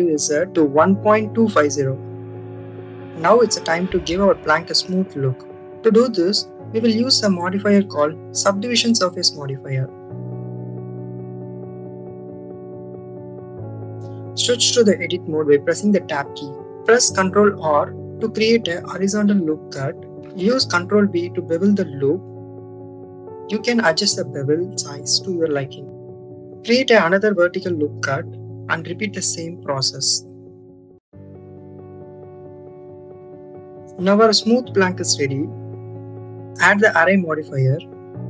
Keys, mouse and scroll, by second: 5.2 click, 10.6-11.6 drag, 15.9 Tab, 17.8 ctrl+r, 21.1 click, 22.2 ctrl+b, 26.6 click, 27.5 ctrl+r, 30.6 ctrl+b, 32.9 click, 33.3 click, 34.3-35.9 drag, 36.3-37.7 drag.